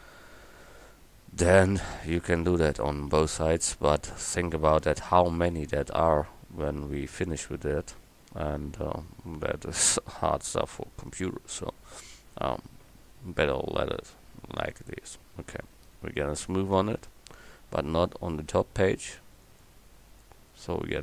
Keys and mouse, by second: 5.6 Tab, 16.8 Tab, 20.9 click.